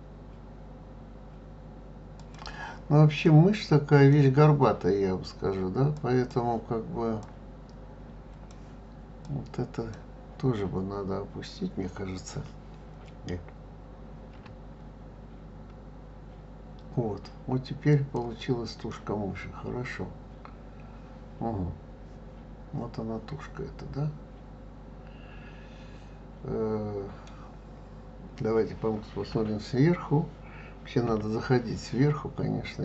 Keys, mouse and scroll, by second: 3.2-5.9 middle drag, 5.9 click, 7.2-9.3 drag, 14.3 g, 18.9-22.0 middle drag, 31.0 KP_7, 32.2-32.7 scroll up 1.